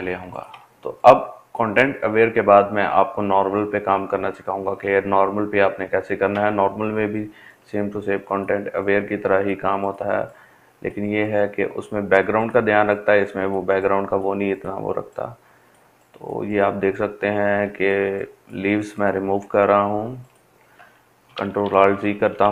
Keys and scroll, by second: 19.0 ctrl+alt+z, 19.3 ctrl+alt+z, 19.5 ctrl+alt+z, 19.6 ctrl+alt+z.